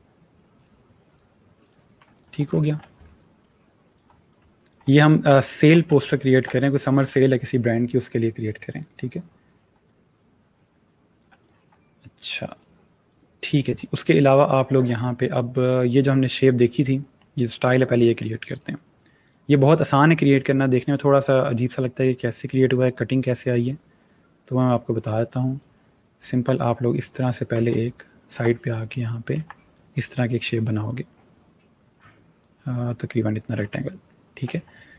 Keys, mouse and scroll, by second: 2.3-3.3 alt+scroll up 3, 3.3 shift+click, 4.8 alt+scroll down 1, 5.6 scroll down 1, 5.7 space, 5.8 click, 6.2 space, 6.4 click, 9.6 space, 9.7 click, 10.1 space, 11.2 click, 13.7 space, 13.8 click, 14.2 space, 15.1 click, 23.7 click, 25.4 click, 27.5 click, 27.6 space, 27.7 click, 28.0 space, 29.2 v, 29.6 click, 33.6 space, 33.7 click, 34.1 space.